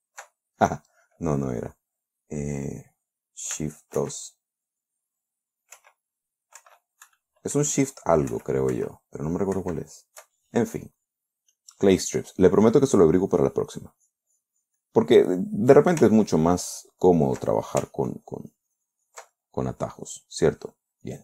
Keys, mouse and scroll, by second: 4.5 shift+2, 6.2-10.0 typing, 11.3 click, 12.0 click, 13.9-15.3 drag, 15.4-16.4 middle drag, 16.6 ctrl+click, 17.1 ctrl+click, 17.5 ctrl+click, 18.3-19.8 ctrl+drag, 19.8-20.7 ctrl+middle drag, 21.0-21.2 middle drag.